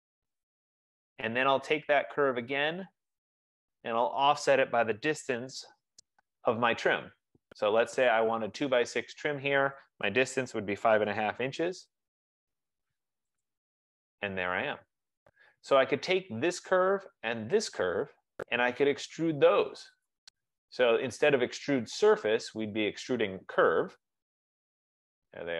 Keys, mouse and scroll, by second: 0.7 click, 2.5 click, 3.9 click, 5.2-7.1 typing, 9.7-13.3 typing, 13.7 click, 15.5-15.9 scroll, 16.1 F15, 16.1 middle click, 17.8 shift+click, 19.7-21.3 typing, 22.8 scroll, 23.1 Down, 24.2 Return.